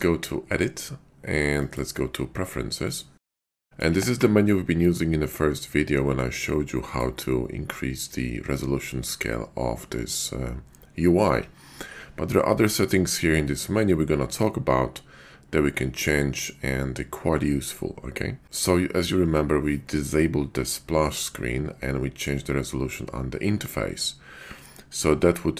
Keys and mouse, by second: 1.6-3.1 drag.